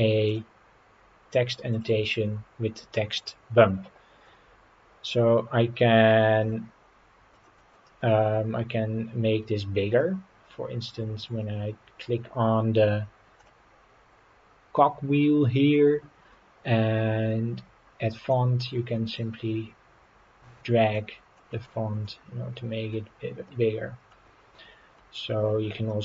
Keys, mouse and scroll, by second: 0.3 click, 1.7 click, 7.3 click, 10.0-10.6 scroll down 3, 13.4 click, 18.3-21.4 drag, 21.6-22.0 scroll down 3, 22.0-22.9 middle drag, 23.5-24.1 middle drag, 24.6-25.0 middle drag, 25.9 middle click.